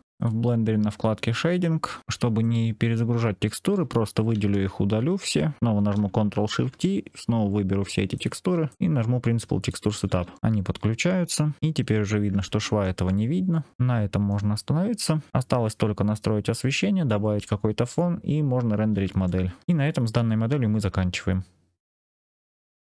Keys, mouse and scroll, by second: 0.1 click, 2.0 scroll down 6, 2.3-3.4 drag, 4.8 Delete, 5.5 click, 6.4 ctrl+shift+t, 11.6 alt+click, 12.3 alt+drag, 12.3 alt+middle click, 13.0 click, 13.0-14.2 middle drag, 18.2-18.9 scroll up 4, 19.1-19.6 shift+middle drag.